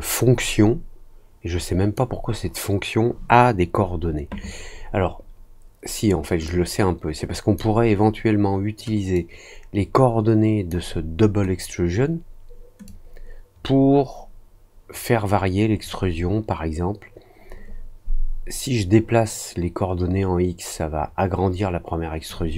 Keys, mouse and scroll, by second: 6.4-7.5 drag, 9.1-10.6 drag, 12.8-22.2 drag.